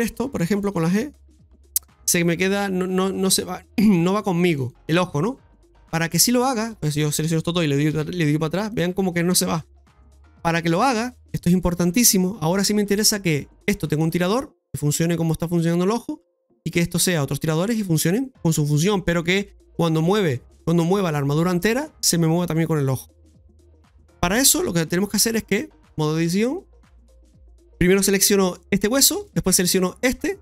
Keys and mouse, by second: 0.0 click, 5.7 shift+middle click, 6.7 shift+right click, 7.9-9.5 typing, 9.7 ctrl+z, 14.1 right click, 21.2 right click, 25.9 click, 27.0 alt+p, 29.8 shift+right click.